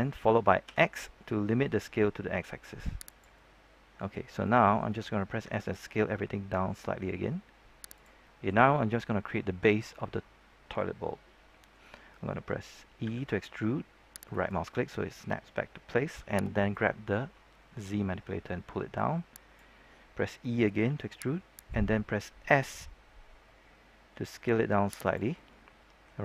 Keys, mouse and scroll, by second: 0.6 x, 3.0 click, 3.3 middle click, 5.4 s, 7.9 click, 8.2 middle click, 8.6 scroll up 1, 8.8-12.3 middle drag, 13.0 e, 14.2-15.4 right drag, 16.6-20.4 drag, 20.8 e, 21.5 right click, 24.0 s, 25.0 click, 25.3-26.2 middle drag.